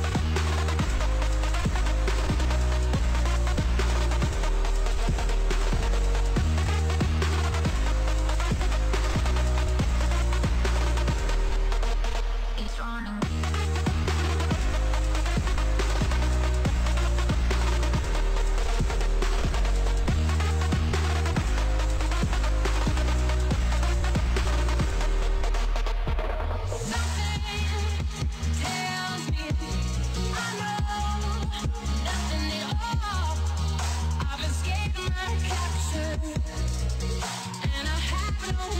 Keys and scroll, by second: 3.7 ctrl+s, 9.5 ctrl+s, 10.4 ctrl+a, 13.3-14.6 typing, 14.7 Return, 16.6 ctrl+z, 21.1 ctrl+shift+c, 22.4-25.4 typing, 23.7 Insert, 25.5 Return.